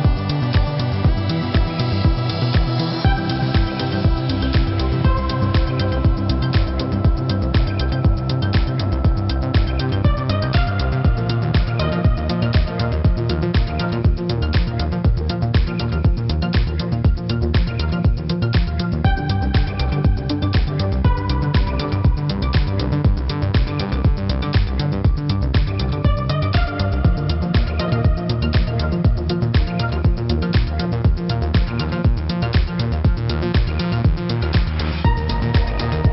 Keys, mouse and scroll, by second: 2.0 shift+click, 2.7 click, 4.1 shift+click, 4.5 click, 5.9 click, 6.2 -, 6.4 click, 8.3 right click, 9.2 click, 12.1 -, 12.4 space, 12.4 -, 12.9 space, 13.7 click, 19.9 shift+click, 23.5 click, 25.6 =, 26.0 click, 26.4 alt+click, 26.9 click, 28.6 click, 29.6 click, 30.0 click.